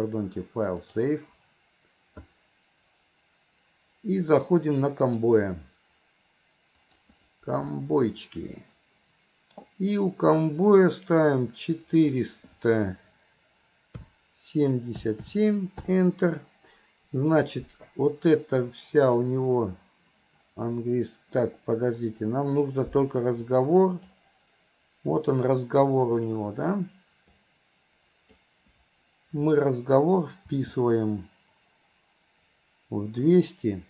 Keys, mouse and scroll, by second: 2.3-15.9 drag, 23.6-24.2 drag, 26.4 click, 27.6 click, 30.6 g.